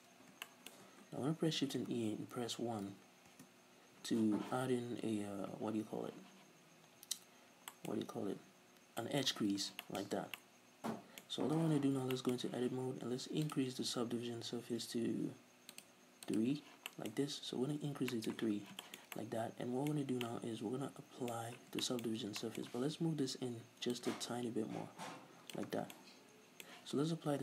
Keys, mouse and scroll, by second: 0.4-1.6 shift+middle drag, 1.6 shift+e, 3.4 Return, 4.4 z, 6.8 scroll down 2, 6.9-9.3 middle drag, 9.3 z, 9.5 middle click, 9.6 scroll down 2, 9.8 shift+middle click, 10.1 Tab, 10.5-10.9 middle drag, 11.6 z, 11.8 scroll up 2, 12.1-13.5 shift+middle drag, 13.5 click, 15.8 click, 16.9-17.2 middle drag, 17.1 scroll up 2, 18.1 middle click, 18.4 z, 18.5 middle click, 18.6 scroll down 2, 18.8-22.7 shift+middle drag, 20.0-20.3 scroll up 2, 21.4-21.9 scroll up 2, 22.7 Tab, 23.1-23.9 middle drag, 23.1 a, 23.9-25.9 drag, 25.7 Tab, 25.9-27.4 middle drag.